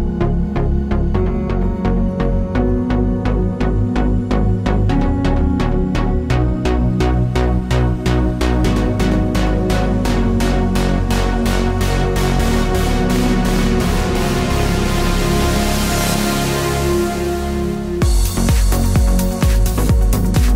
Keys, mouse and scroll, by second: 2.7 g, 6.7 click, 8.4 g, 10.9 ctrl+z, 13.4 click, 15.2 s, 19.8 click.